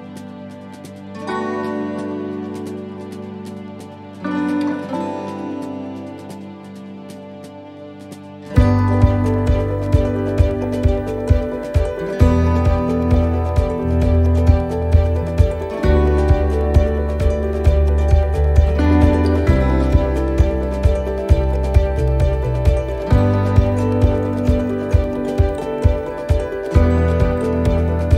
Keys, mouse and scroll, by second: 0.5 middle click, 0.5 scroll up 3, 1.5 l, 3.1 l, 3.3 middle click, 4.3-5.0 scroll down 3, 4.8 middle click, 6.7 scroll down 1, 7.3 scroll down 1, 7.5 middle click, 9.3 middle click, 10.1-10.4 scroll down 1, 10.8 middle click, 10.8-11.4 scroll down 1, 11.4 scroll down 1, 12.0 middle click, 12.4 scroll down 1, 12.9 shift+middle click, 13.6 middle click, 14.4 middle click, 17.4 scroll up 4, 18.0 shift+middle click, 18.5-18.8 scroll up 2, 20.5 click, 21.7 click.